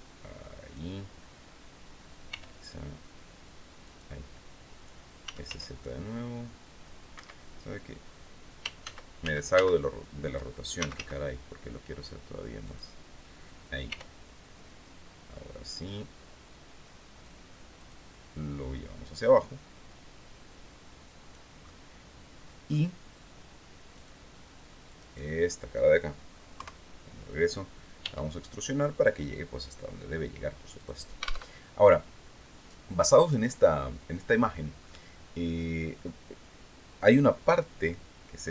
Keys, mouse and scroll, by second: 1.8 r, 3.3 click, 4.5-5.5 typing, 6.6 Escape, 8.3 ctrl+z, 10.3 ctrl+s, 10.4 z, 12.1 click, 13.4 r, 17.3 click, 18.5-21.0 drag, 21.1-22.4 drag, 23.4 click, 24.5 right click, 26.0 KP_3, 27.5 e, 30.3 click, 31.0 alt+Tab.